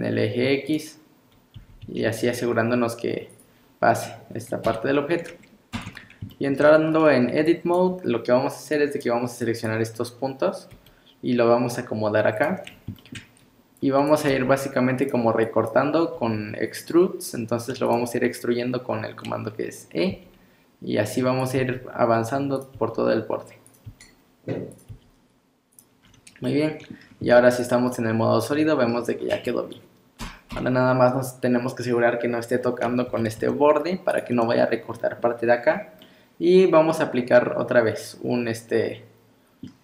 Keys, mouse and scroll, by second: 1.3 scroll up 1, 1.6 g, 4.7 KP_3, 5.7 Tab, 6.0-6.3 scroll up 2, 6.3 shift+middle click, 7.4 click, 8.7 click, 9.4 click, 10.7 g, 12.7 scroll up 2, 13.0 shift+middle click, 13.8 click, 14.3 g, 15.4 click, 16.2 g, 18.1 scroll up 2, 20.1 e, 21.6 e, 22.8 e, 23.9 e, 24.9 e, 26.0 scroll down 5, 26.5 middle click, 27.0 scroll down 2, 27.2 z, 27.9 middle click, 29.1 scroll up 4, 29.3 Tab, 29.5 middle click, 30.5 KP_1, 33.1 g, 35.7-36.0 scroll down 3, 36.0 middle click.